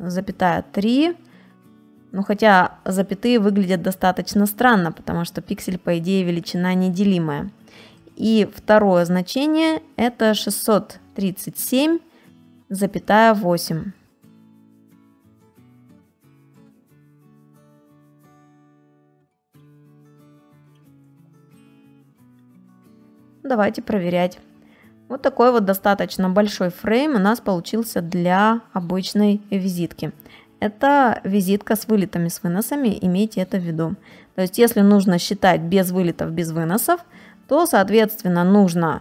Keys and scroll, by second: 0.1 ,, 1.3 BackSpace, 2.0 shift+/, 2.3 3, 6.6 Return, 8.1 alt+Tab, 12.6 alt+Tab, 16.7 6, 19.2 BackSpace, 20.7 7, 20.8 shift+/, 21.0 8, 21.9 Return, 24.3 space, 37.0 alt+Tab.